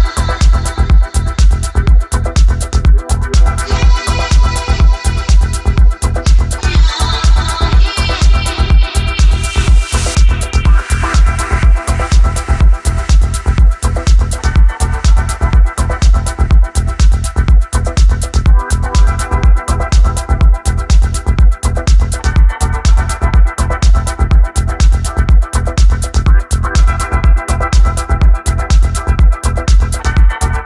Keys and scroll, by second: 0.0 d, 0.8 f, 4.3-6.1 typing, 6.5 Escape, 9.3 s, 9.7 a, 10.9 w, 15.4 r, 17.3 w, 18.5 e, 20.8 r, 22.3 w, 24.0 r, 24.6 w, 28.7 1, 30.5 s.